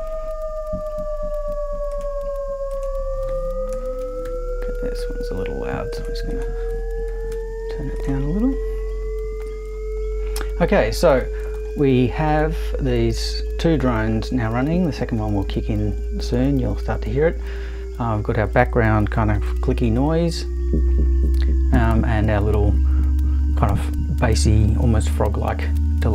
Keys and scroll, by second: 3.7 Right, 4.0 BackSpace, 4.2 3, 7.1 BackSpace, 7.3 2.